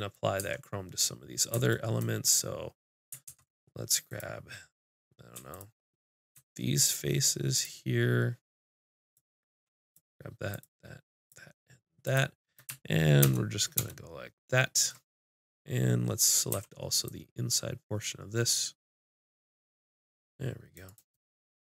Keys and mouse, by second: 0.4 Tab, 3.3 ctrl+Tab, 5.5-6.6 drag, 6.8-13.2 drag, 13.2 ctrl+KP_Add, 16.5 c, 21.2-21.7 middle drag.